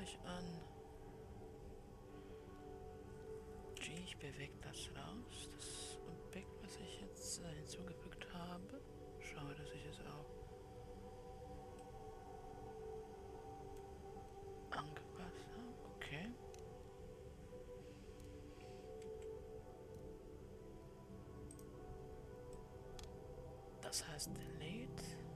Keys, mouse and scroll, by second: 5.8 g, 14.1-16.4 middle drag, 16.4-19.2 scroll up 4, 19.7 g, 24.0-25.3 middle drag.